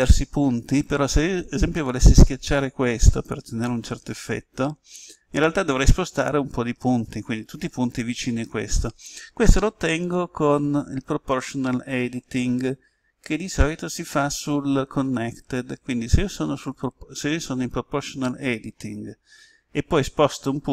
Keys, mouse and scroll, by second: 9.9-20.7 drag.